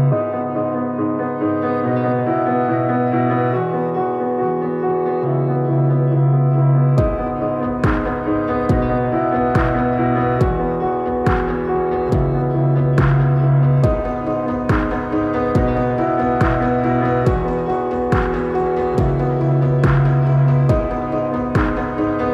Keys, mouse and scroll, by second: 3.0 click, 3.0 click, 6.7 click, 6.7-9.9 drag, 18.6 click.